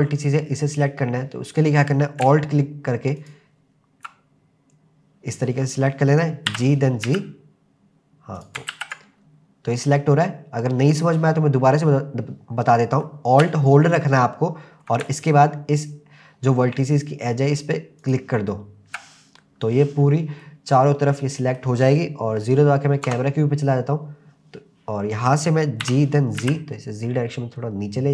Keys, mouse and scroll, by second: 3.2 alt+click, 6.5 g, 7.1 z, 8.4 click, 8.7 ctrl+z, 10.8 click, 14.3 alt+scroll up 1, 18.0 alt+click, 20.4-21.6 middle drag, 23.1 KP_0, 24.3 scroll down 1, 25.8 g, 26.4 z.